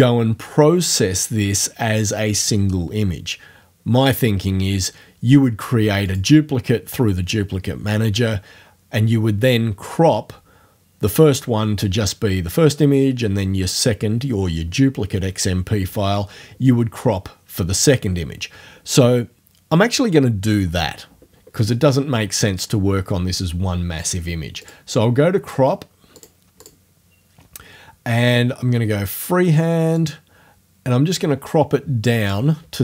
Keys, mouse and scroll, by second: 6.1 click, 24.6 click, 26.2 click, 26.6 click, 30.0-32.5 drag.